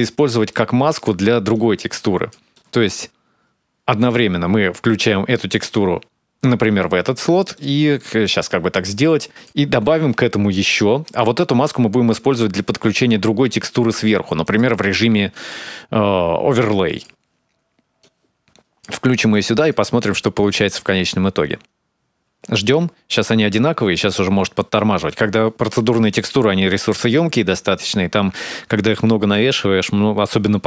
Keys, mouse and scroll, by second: 0.0 middle click, 0.5-1.3 scroll down 7, 1.3 click, 2.3 middle click, 7.3 middle click, 8.2 click, 9.7 shift+d, 10.6 middle click, 11.4 click, 14.2 click, 17.8 click, 18.9 middle click, 19.4 ctrl+shift+click, 23.7 middle click, 24.3 middle click, 26.9-27.3 scroll up 2, 27.3 scroll down 1, 27.5-28.1 scroll down 1, 28.1-28.7 scroll up 2, 28.7 middle click.